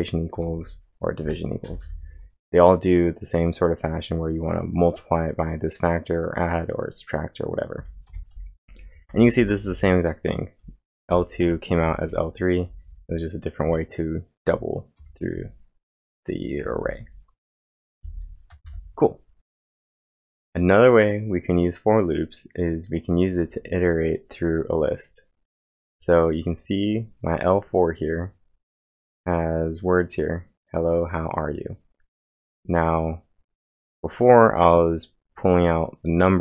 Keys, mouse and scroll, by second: 0.0-0.2 typing, 7.8-11.6 typing, 13.4-17.1 typing, 19.2-19.9 typing.